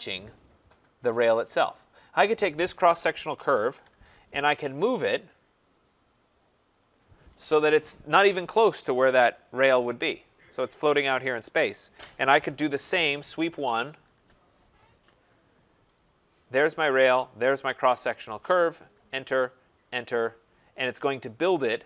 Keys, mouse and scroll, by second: 0.9 click, 3.0-4.3 typing, 5.0 click, 6.9 click, 7.5 Escape, 7.7 Escape, 8.0 scroll, 9.1 middle click, 10.5 right click, 13.0-14.1 typing, 16.5 click, 17.4 click, 18.9 Return, 19.7 Return.